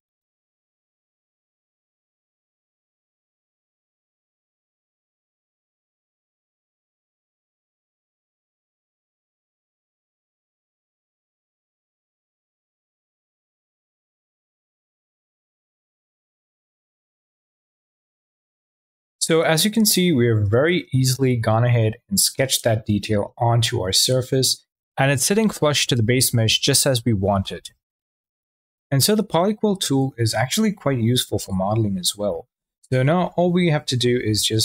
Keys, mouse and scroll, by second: 1.7-2.1 drag, 2.9-3.2 drag, 3.5-4.2 drag, 5.2-6.6 drag, 7.1-7.4 drag, 7.6 click, 8.7 ctrl+z, 8.8 click, 9.1 shift+click, 9.3 ctrl+z, 9.6 drag, 10.0-10.4 drag, 10.5 ctrl+z, 10.6-11.3 drag, 11.3 ctrl+z, 11.5-11.8 drag, 12.0 click, 12.2 ctrl+z, 12.3-12.7 drag, 12.7 click, 14.0 click, 16.8 middle click, 21.4 middle click, 32.0 Tab, 33.7 q.